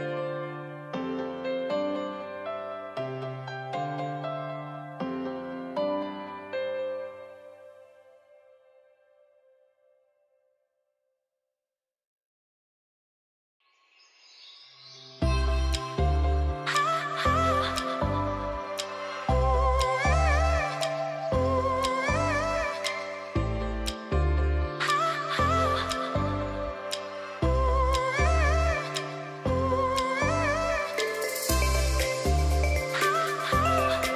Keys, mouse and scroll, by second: 7.8 d, 12.3 d, 12.9 alt+click, 24.3 click, 27.7-34.1 drag, 29.4-31.0 shift+drag.